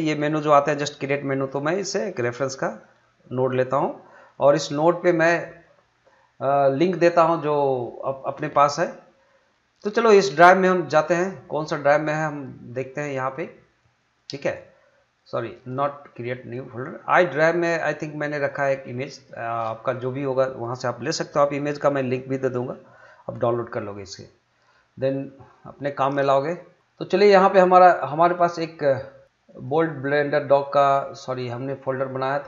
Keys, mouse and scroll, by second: 2.3-11.8 drag, 18.4 click, 29.4 click.